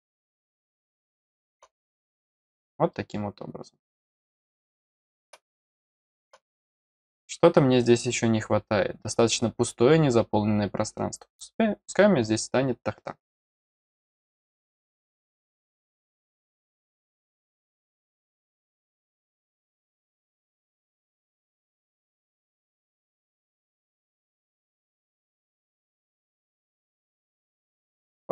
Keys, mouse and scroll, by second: 1.8 scroll up 1, 2.9-5.2 middle drag, 5.7 middle click, 14.4-16.5 drag, 17.0 click, 21.5 click, 23.7 click, 23.9 click, 25.0 click, 25.1 click, 26.3 click, 26.7-27.1 scroll up 2, 27.3 middle click.